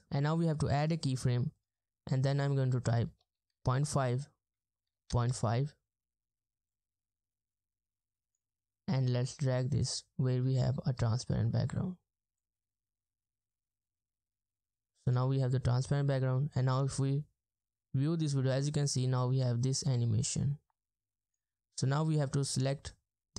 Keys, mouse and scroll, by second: 1.7 double click, 3.3-5.6 typing, 11.1 Return, 11.2-11.7 ctrl+scroll down 1.